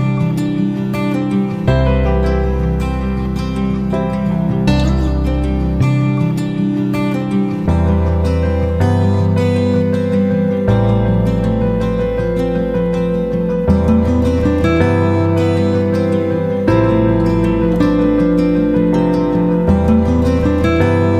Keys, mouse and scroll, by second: 1.1-6.9 drag, 8.8 F9, 9.9-21.1 drag.